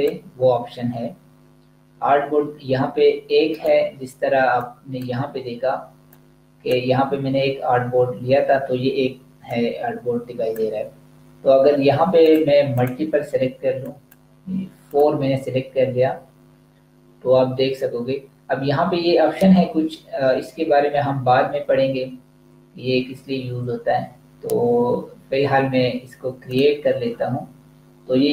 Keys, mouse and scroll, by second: 3.5 click, 9.3 click, 26.4 click.